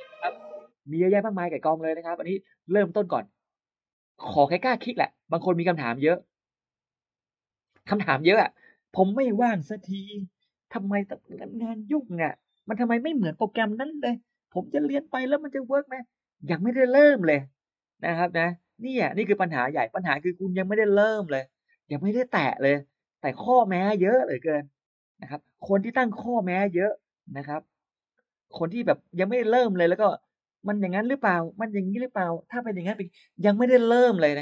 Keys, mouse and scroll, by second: 0.1 click, 3.3 click, 4.8-5.4 scroll down 1, 7.5-7.8 scroll up 1.